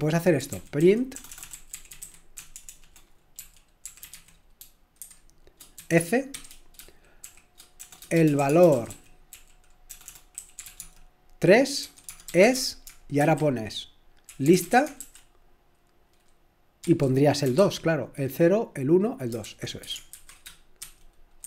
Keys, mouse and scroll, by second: 0.0-2.7 typing, 3.7-10.8 typing, 11.8-13.2 typing, 14.3-15.0 typing, 16.8-17.5 typing, 19.4-21.4 typing.